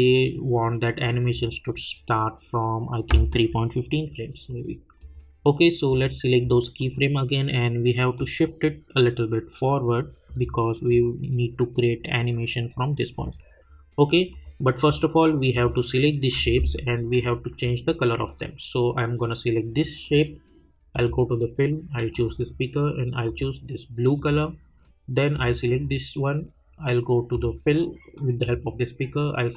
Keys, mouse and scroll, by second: 17.5 alt+scroll up 1, 20.9 click.